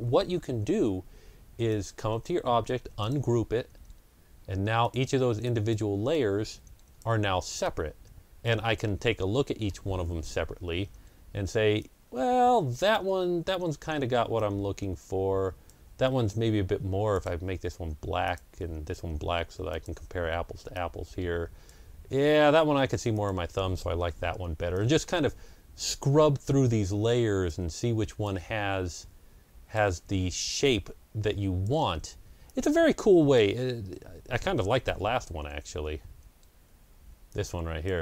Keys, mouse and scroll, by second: 1.5-10.4 drag, 8.7 scroll down 1, 9.3 scroll up 1, 10.3 ctrl+scroll down 1, 11.7-24.6 drag, 24.2 Delete, 24.6-35.7 drag, 25.9 Delete, 27.7 Delete, 29.9 Delete, 31.8 Delete, 34.9 ctrl+z, 35.7 ctrl+z, 37.2-38.0 drag.